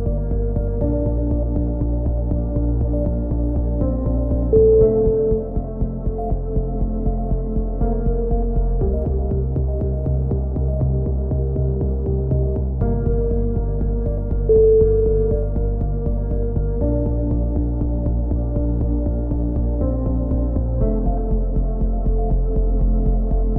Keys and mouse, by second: 0.1 middle click, 0.1 click, 6.8 click, 7.6 a, 8.1 right click, 8.5 click, 9.2 shift+s, 9.8 middle click, 10.3-12.0 drag, 12.2 a, 13.0 click, 13.3 middle click, 13.8 click, 14.5 a, 15.2 right click, 15.6 middle click, 16.0 click, 16.8 right click, 17.7 middle click, 17.9 click, 18.7 right click, 19.2-20.2 middle drag, 19.9 right click, 20.3-22.6 drag, 21.8 right click, 23.1 click.